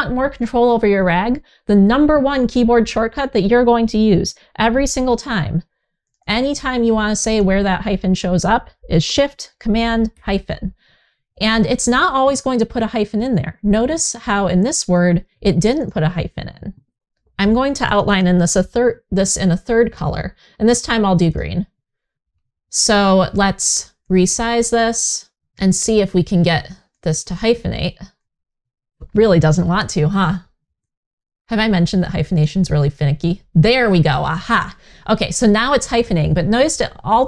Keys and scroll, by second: 9.8 shift+super+-, 29.4 super+z.